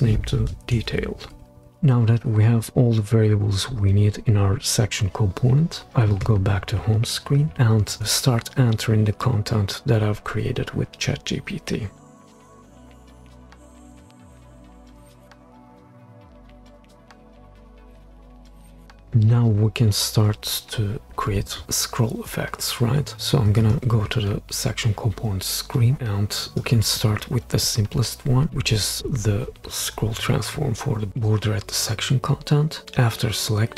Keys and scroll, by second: 0.6-1.6 typing, 11.8 super+c, 12.0 super+v, 12.0 Return, 12.3 super+c, 12.5 super+v, 12.6 Return, 13.0-13.9 typing, 13.1 Return, 14.6 super+c, 14.8 super+v, 14.9 Return, 15.0 super+c, 15.1 super+v, 15.5 super+d, 16.0 typing, 16.1 Return, 16.4 super+c, 16.6 super+v, 16.6 Return, 16.8 super+c, 17.0 super+v, 17.2 super+d, 17.6-18.4 typing, 18.2 super+c, 18.5 super+v, 18.6 Return, 18.8 super+c, 19.0 super+v.